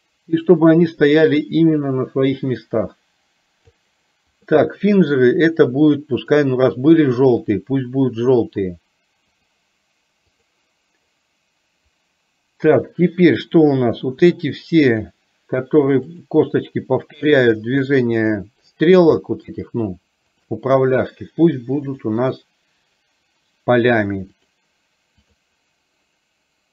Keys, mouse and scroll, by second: 6.2 click, 7.4-9.6 drag, 10.4 click, 13.6 click, 17.2 shift+click, 18.3 shift+click, 19.3 shift+middle click, 20.4 shift+click, 21.9-24.7 drag, 25.3 click.